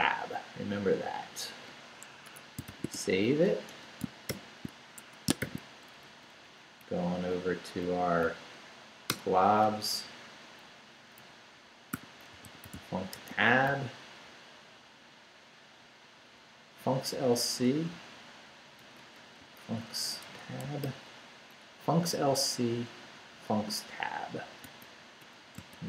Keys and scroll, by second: 2.3 Escape, 2.4-4.3 typing, 3.7 Return, 5.0 shift+Escape, 5.4 shift+;, 6.0 shift+Up, 9.1 Return, 10.9 Down, 11.7-14.2 typing, 18.8-21.3 typing, 24.6-25.8 typing.